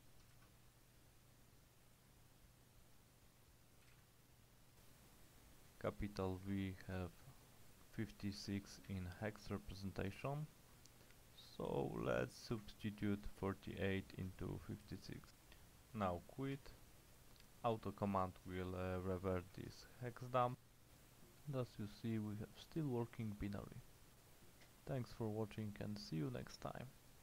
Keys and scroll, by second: 0.0-1.9 typing, 3.7-4.5 typing, 7.2 Return, 9.7-12.2 typing, 12.6 Escape, 14.3-15.7 typing, 16.6 Return, 17.9-20.1 typing, 20.6 Return.